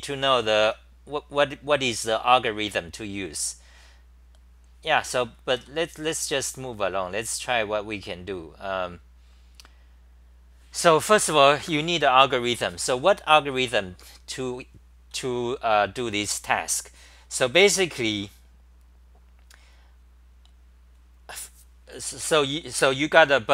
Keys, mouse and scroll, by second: 5.5 ctrl+g, 5.8 typing, 6.0-8.2 scroll down 34, 8.2-10.6 scroll up 1, 14.3 scroll, 15.1 w.